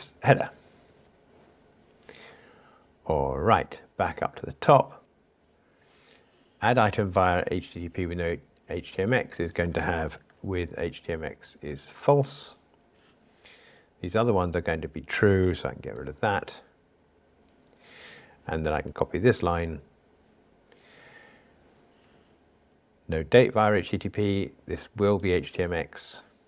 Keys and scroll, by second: 1.0 Escape, 12.2 Return, 15.9 super+BackSpace, 19.4 super+c.